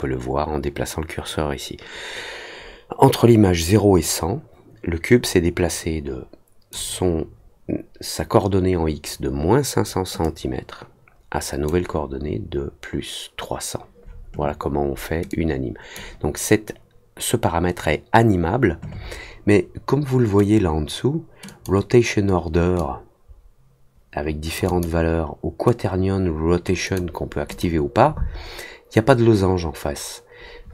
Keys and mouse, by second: 10.2-11.6 drag, 15.2 click, 21.4 click, 22.7-24.5 drag, 24.6 click, 26.8 click, 27.4 click.